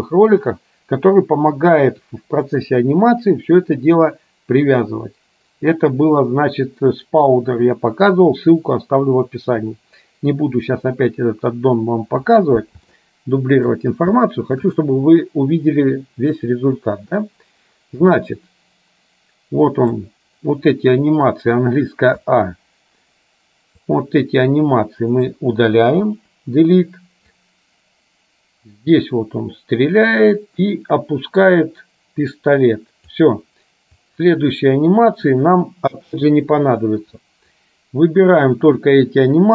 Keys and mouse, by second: 13.1 shift+middle click, 14.3 shift+middle click, 16.6-20.2 drag, 22.3 a, 23.8 click, 24.2-25.4 drag, 26.2 Delete, 27.6-33.3 drag, 34.1-35.4 drag, 36.1 Delete, 37.7-38.9 drag.